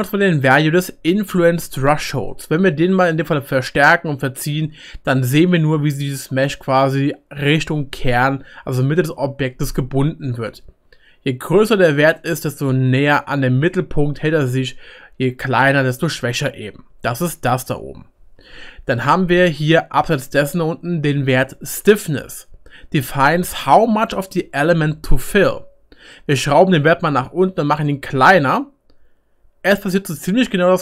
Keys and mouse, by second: 1.8-7.2 middle drag, 2.3-5.5 drag, 6.6 click, 6.6 right click, 9.9 middle click, 10.2 click, 10.2 right click, 13.2-15.8 middle drag, 18.4 ctrl+z, 30.2-30.8 middle drag.